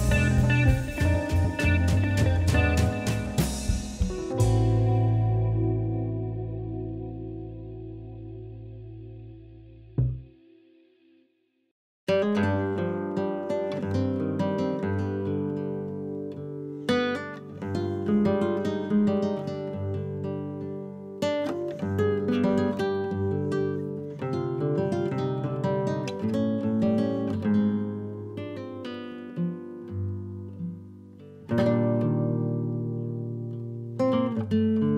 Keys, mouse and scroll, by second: 0.3 ctrl+z, 0.5 ctrl+z, 2.2 Tab, 2.3 ctrl+z, 2.3 ctrl+z, 2.9 middle click, 3.4 click, 4.3 shift+click, 5.1 KP_3, 5.9 ctrl+shift+b, 7.7-8.7 middle drag, 8.7 a, 9.5 q, 13.0 KP_1, 14.0 g, 15.4-16.4 middle drag, 16.4 KP_3, 17.9 click, 18.3 click, 19.0 Delete, 19.8 click, 20.6 g, 22.0 click, 22.6 g, 23.6 drag, 23.9-25.6 middle drag, 25.6 click, 26.1 Tab, 26.8 KP_3, 27.3 KP_1, 28.0 shift+z, 28.2 click, 28.6 scroll up 2, 28.9 shift+middle click, 29.6 g, 31.2 shift+z, 31.5 scroll down 1, 31.9 Tab, 32.2 click, 32.4 scroll down 1, 32.6-33.3 middle drag, 33.3 click, 33.9-34.2 right drag, 34.2 click, 34.5-34.9 middle drag.